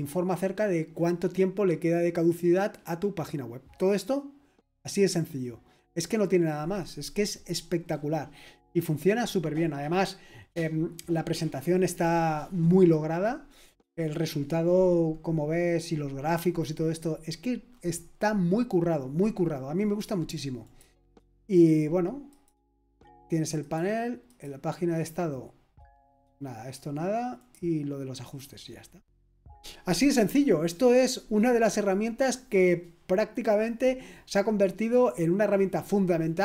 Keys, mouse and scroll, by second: 7.8-10.9 scroll down 2, 10.9-17.7 scroll down 1, 17.7-20.6 scroll up 2, 20.6-27.8 drag.